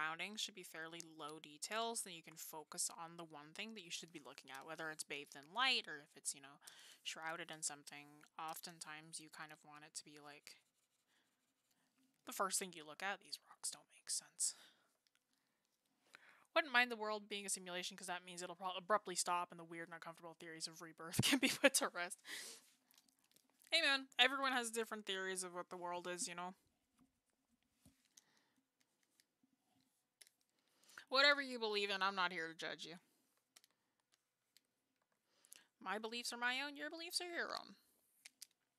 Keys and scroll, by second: 35.0 ctrl+z.